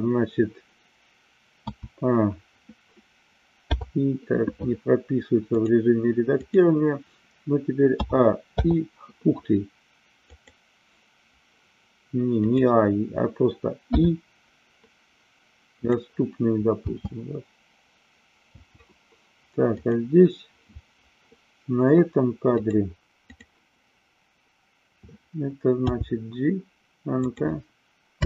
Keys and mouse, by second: 1.6 a, 3.5 i, 5.6-6.6 drag, 7.9 a, 8.4 i, 10.4 click, 16.7 space, 19.7 click, 22.5 click, 25.7 g, 27.3 click.